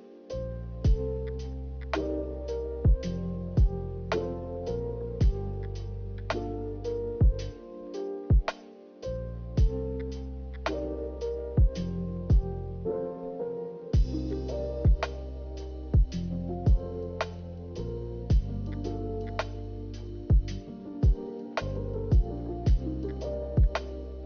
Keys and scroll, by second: 0.1 ctrl+z, 0.3 ctrl+z, 2.6 i, 4.0 Delete, 4.4 Delete, 5.4 z, 12.9 b.